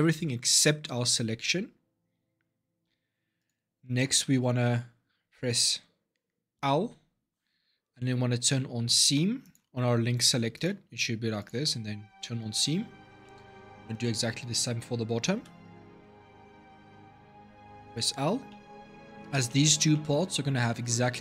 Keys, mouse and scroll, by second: 3.2 click, 3.9 middle click, 4.4 scroll up 2, 6.3 l, 9.2 click, 10.3-13.0 drag, 13.0-15.1 middle drag, 15.1 l, 17.2 l, 18.3-21.2 middle drag.